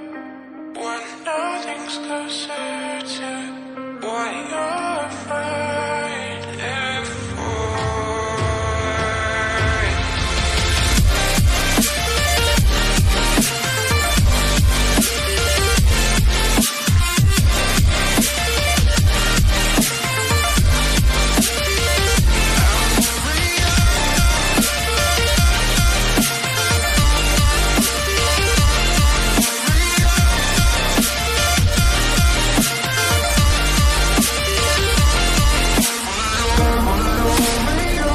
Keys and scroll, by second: 0.0 ctrl+j, 0.5 shift+Down, 5.1 shift+Down, 6.2 shift+Up, 34.7 shift+Up, 34.7 Return.